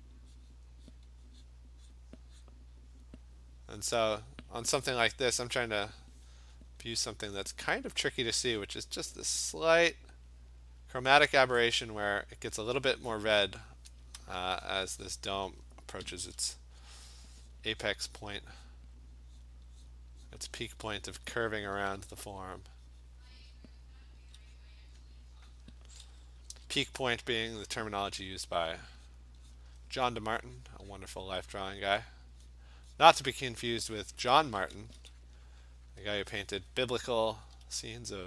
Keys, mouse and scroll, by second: 0.0 click, 0.5 click, 1.0 click, 1.5 click, 1.9 click, 2.2 alt+click, 2.5 click, 3.0 click, 4.2 click, 4.9 click, 5.6 click, 5.8 click, 6.4 click, 6.7 click, 7.3 click, 7.9 click, 8.2 click, 14.0 alt+click, 14.7 click, 15.1 click, 15.5 alt+click, 16.1 ], 16.3 ], 17.1 click, 17.6 click, 17.9 click, 18.3 click, 18.7 click, 19.1 alt+click, 19.2 click, 19.5 click, 19.9 click, 20.4 click, 20.7 click, 21.2 click, 21.7 click, 21.8 [, 22.0 [, 22.2 [, 22.4 click, 23.1 click, 23.5 click, 24.2 [, 24.6 click, 25.1 click, 25.6 click, 26.0 ], 26.5 ], 26.8 ], 27.4 alt+click, 27.5 alt+click, 28.4 click, 28.8 click, 29.2 click, 29.6 click, 30.2 alt+click, 30.7 click, 31.0 click, 31.4 click, 31.6 click, 31.9 click, 31.9-32.6 alt+click, 32.1 click, 32.4 alt+click, 32.5 click, 33.0 click, 33.6 click, 33.8 click, 34.6 alt+click, 34.6 [, 34.8 [, 35.1 [, 35.3 click, 35.5 click, 35.9 click, 36.4 alt+click, 36.9 click, 37.2 click, 37.3 ], 37.6 ], 37.8 ], 38.0 click.